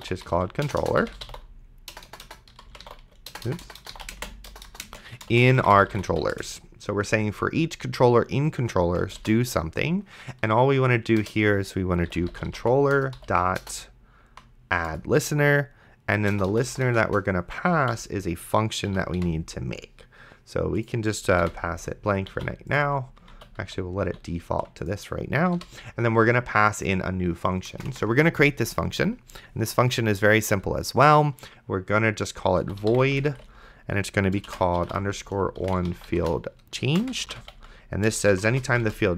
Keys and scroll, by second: 0.0-6.6 typing, 9.0 space, 9.5 shift+[, 11.2 Return, 11.8-14.2 typing, 14.9 Return, 16.3 BackSpace, 17.9 Delete, 18.9 End, 19.2 ;, 21.4 ', 22.6 ctrl+z, 23.6 ctrl+z, 25.6 ;, 27.7 Return, 32.6-33.6 typing, 34.8-39.1 typing.